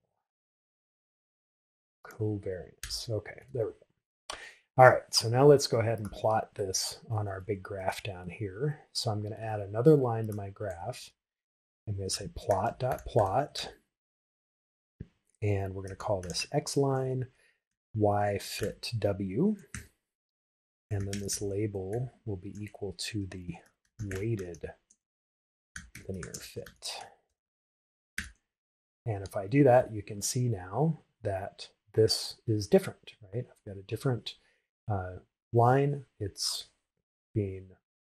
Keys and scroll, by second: 4.2 shift+Return, 20.5 shift+w, 23.5 shift+', 24.3 shift+w, 26.4 shift+l, 27.4 shift+f, 29.0 shift+Return.